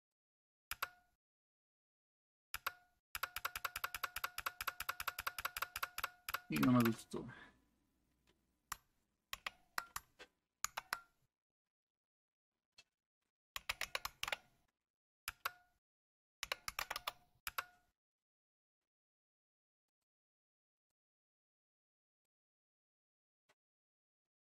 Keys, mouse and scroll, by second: 0.3 click, 0.7 Return, 2.5 Return, 3.1 Return, 3.4 Return, 3.8 Return, 3.9 Return, 4.1 Return, 4.4 Return, 4.6 Return, 4.8 Return, 5.0 Return, 5.2 Return, 5.4 Return, 5.5 Return, 5.7 Return, 6.2 Return, 6.3 Return, 6.6 Return, 6.9 Return, 9.3 ctrl+c, 10.7 ctrl+z, 13.3-14.7 typing, 15.3 Return, 16.2-17.5 typing, 19.9 click, 20.8 click, 22.1 click.